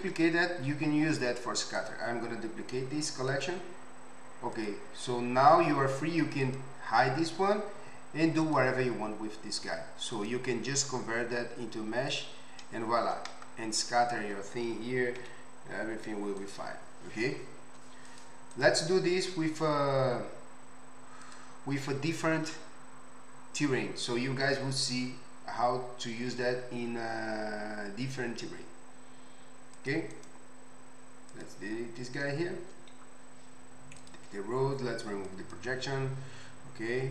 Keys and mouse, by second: 1.8-16.5 right drag, 4.5 click, 6.4 click, 8.4 click, 15.2 g, 16.5-18.1 middle drag, 18.1 click, 18.2 middle click, 18.5-34.0 right drag, 29.7 click, 29.7 middle click, 34.1-35.2 middle drag.